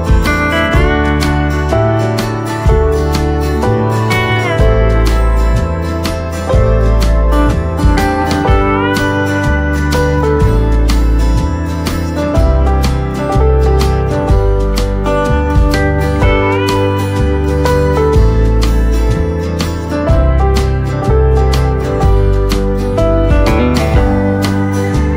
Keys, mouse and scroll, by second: 10.4 right click, 12.1 scroll up 1, 13.8-25.1 drag.